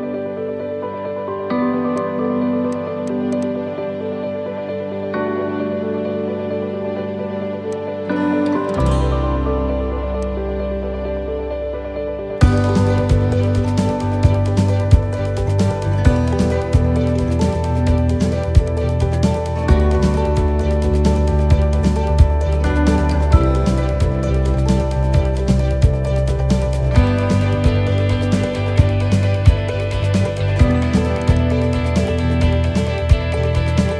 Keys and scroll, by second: 1.1 ctrl+-, 28.6 ctrl+o, 33.7 v.